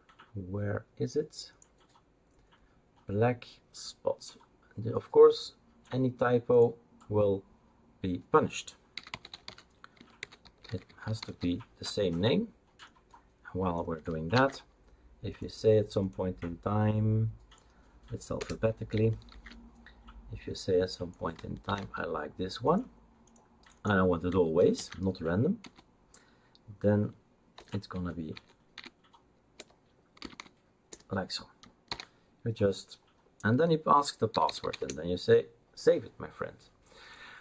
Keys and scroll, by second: 8.9-11.7 typing, 14.3 ctrl+c, 18.4 Return, 19.3 ctrl+v, 21.6 ctrl+c, 24.8 ctrl+v, 25.6 space, 27.5 BackSpace, 27.9 Tab, 28.3 Tab, 28.7 Tab, 29.5 BackSpace, 30.2 space, 30.4 space, 31.8 ctrl+s, 34.2-35.2 typing.